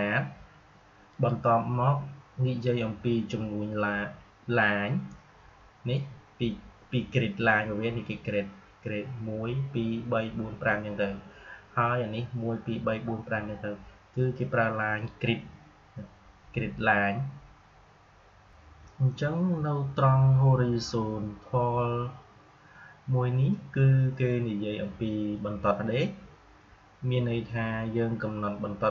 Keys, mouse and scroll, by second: 1.0 click, 18.4 click.